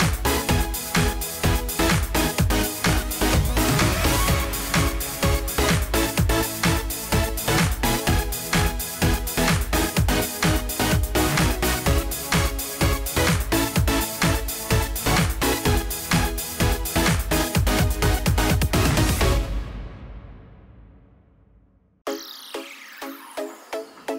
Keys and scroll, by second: 2.2 ctrl+a, 4.7 ctrl+d, 8.7 ctrl+t.